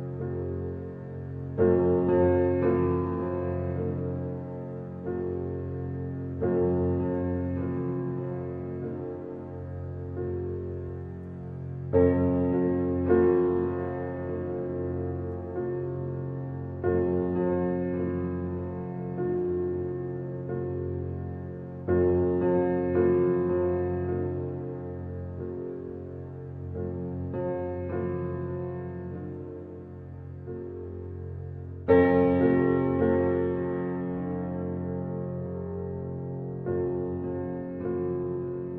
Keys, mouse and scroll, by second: 0.1 click, 1.5-4.4 middle drag, 4.4-4.8 scroll up 1, 4.8-9.5 shift+middle drag, 12.9 e, 19.7 f, 20.3-21.8 middle drag, 21.8 click, 22.8 Tab, 23.2 middle click, 24.2 Tab, 24.8 middle click, 25.6 ctrl+r, 27.7 Tab, 28.1-31.1 middle drag, 31.1-31.5 scroll down 3, 31.5-35.1 middle drag, 36.3 click.